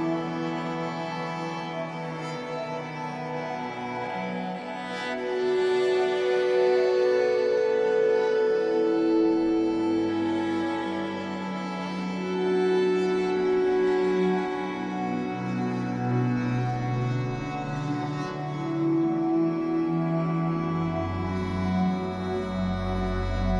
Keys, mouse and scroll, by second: 3.0-5.8 drag, 5.8 middle click, 6.8-11.9 drag, 11.9-14.4 middle drag, 14.4-19.9 drag, 19.9-21.5 middle drag, 21.5-23.5 drag.